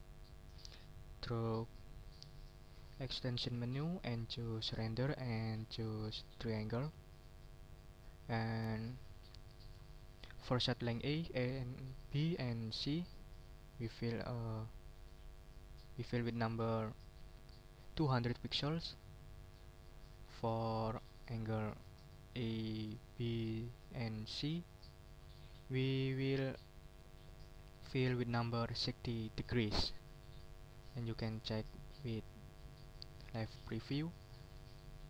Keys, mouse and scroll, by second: 2.7 click, 6.8 click, 8.0 click, 13.7 click, 14.9-15.9 drag, 16.2 click, 18.1 click, 19.4 click, 20.3 click, 21.7 click, 22.4 click, 22.8 click, 30.9 click, 34.2 click.